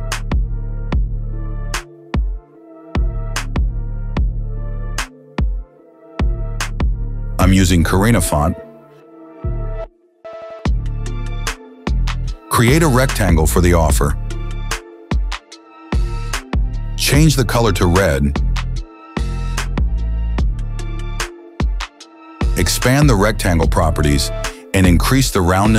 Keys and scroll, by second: 0.0-2.5 typing, 8.9-10.0 typing, 10.1 Return.